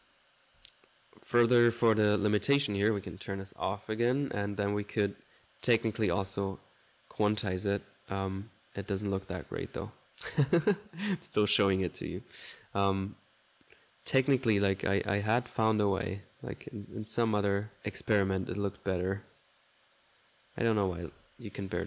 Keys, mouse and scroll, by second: 0.0-5.0 drag, 5.2 click, 5.7 click, 6.1-10.1 drag, 10.3-11.9 drag, 12.0 click, 12.6 1, 13.0-17.9 drag, 17.8 typing, 18.5-20.0 drag, 20.1 click.